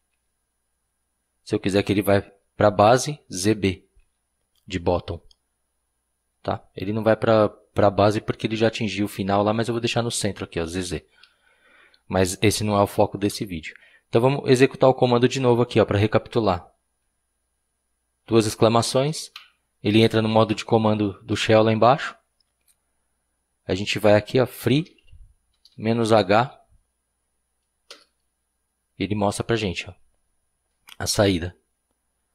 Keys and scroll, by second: 0.0-0.6 typing, 3.6-4.5 typing, 10.0 typing, 18.8 typing, 24.3-26.2 typing, 27.9 Return.